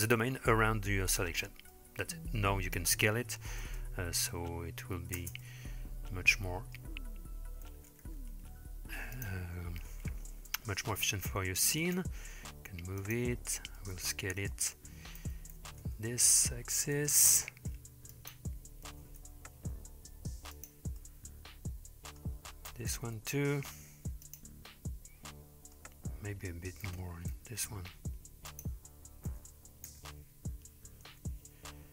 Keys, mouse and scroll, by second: 1.7-2.5 middle drag, 3.7 space, 5.3 space, 5.4-6.8 middle drag, 7.7 s, 10.8 g, 13.8-14.5 middle drag, 15.2 s, 18.9 g, 21.0-22.2 middle drag, 22.7 s, 24.7-25.8 middle drag, 26.9 s, 29.3 g.